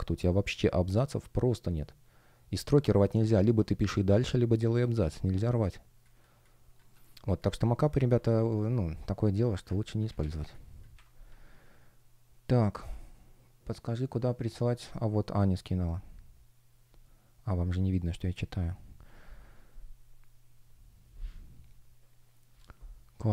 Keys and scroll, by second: 4.8 space, 7.8 super+w, 10.8 Delete.